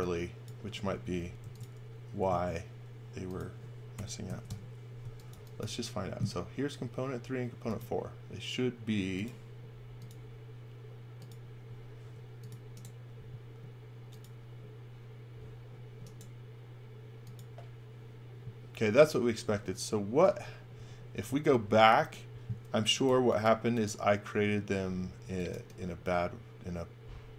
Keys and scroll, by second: 1.2 m, 3.9 3, 4.2 x, 4.4 Return, 5.0 x, 5.3 v, 12.0 space, 20.2 super+z, 20.7 super+z, 21.5 super+z, 22.8 x, 23.0 v, 23.4 space, 25.2 x, 25.5 v.